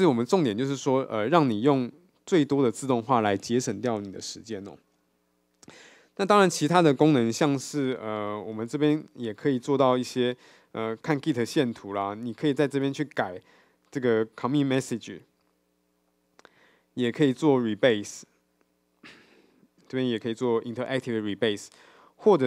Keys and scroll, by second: 15.3 F2.